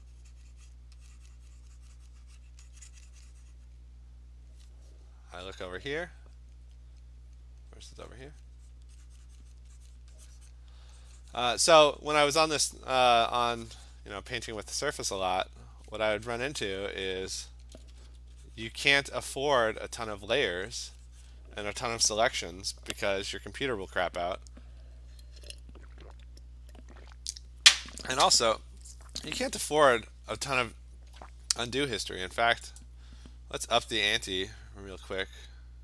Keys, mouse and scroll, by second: 0.7 click, 2.4 click, 3.7 click, 6.5 click, 8.7 click, 9.6 click, 10.0 click, 10.5 click, 12.3 click, 12.6 click, 13.2 click, 14.0 click, 14.7 alt+click, 14.8 alt+click, 15.0 click, 15.1 alt+click, 15.2 click, 15.5 alt+click, 15.7 click, 16.9 click, 17.1 click, 17.7 ], 17.9 ], 18.1 ], 18.6 click, 19.2 click, 20.2 click, 20.5 click, 20.6 alt+click, 20.6 [, 20.8 click, 21.1 click, 21.3 click, 29.8 click, 30.5-32.8 scroll, 32.8 click.